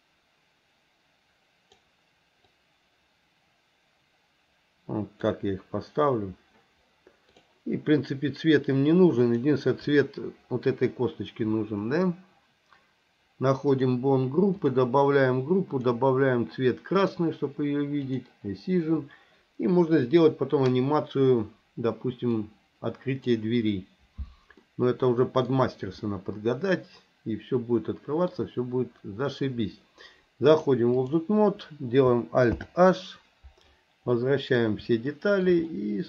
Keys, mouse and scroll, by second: 2.5-5.2 drag, 7.3 click, 13.7 click, 14.6 click, 15.7-17.2 drag, 18.0 click, 22.3-23.3 drag, 24.7-25.5 middle drag, 26.1-28.3 middle drag, 30.5 click, 33.1 alt+h, 34.2 middle click, 35.2 shift+middle click, 35.7-36.0 middle drag.